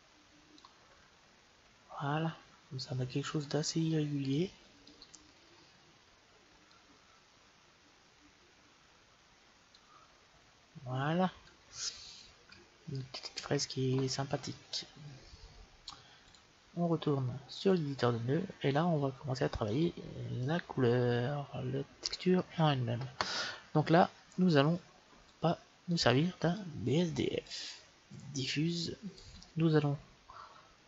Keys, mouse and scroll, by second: 4.2-6.0 drag, 6.5-8.4 drag, 16.1-17.9 drag, 18.9-23.6 middle drag, 21.3 scroll up 1, 25.1-28.2 drag, 28.4-30.0 drag.